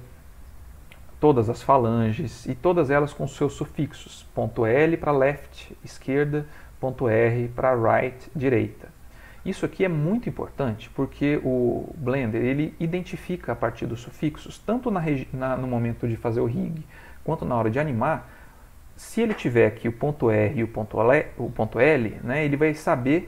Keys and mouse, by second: 0.2 middle click, 0.7 ctrl+middle click, 1.2 shift+middle click, 2.2 click, 5.9 click, 8.2 ctrl+middle click, 9.2 middle click, 10.5 shift+middle click, 11.4 ctrl+middle click, 11.9 middle click, 12.5 shift+middle click.